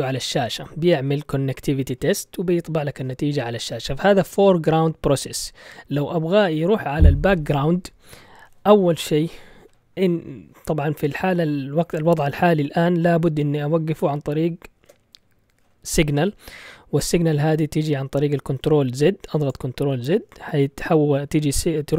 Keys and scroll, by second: 14.7 ctrl+z.